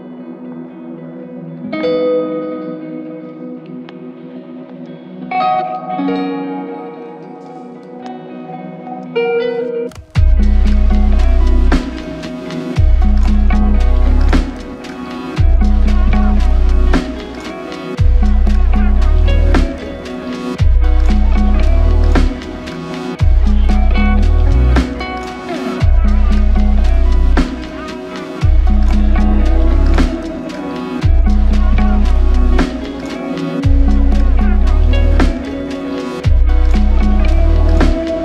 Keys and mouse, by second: 0.9 double click, 3.5 alt+click, 4.8-5.1 typing, 6.7 double click, 12.0 ctrl+alt+click, 13.0 alt+click, 13.9 ctrl+alt+click, 15.3 f, 16.3 click, 21.8 typing, 22.8 double click, 28.2 shift+click, 31.7 shift+click, 31.9 c, 33.4 double click, 37.2 double click, 37.5 ctrl+click.